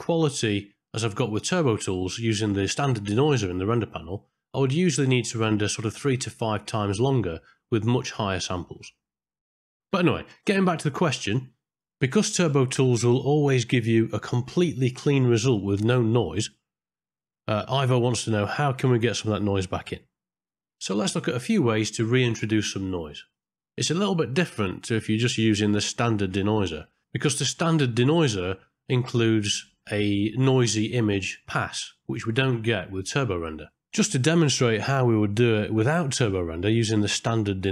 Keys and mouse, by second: 22.4 click, 23.9 middle click, 30.7 middle click, 31.5 click, 31.9 click, 36.6 middle click, 37.5 middle click.